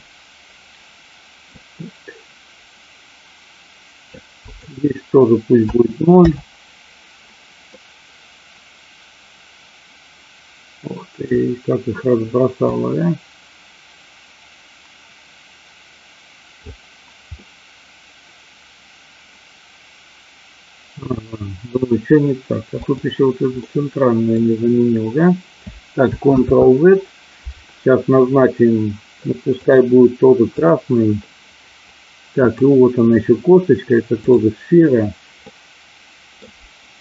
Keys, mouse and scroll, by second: 1.5-4.0 drag, 4.4-6.6 drag, 7.8-11.3 middle drag, 12.6-16.5 drag, 17.3-21.6 middle drag, 22.6 click, 23.6 middle click, 26.3 ctrl+z, 29.6 click, 30.4 click, 32.4 click, 35.6 middle click.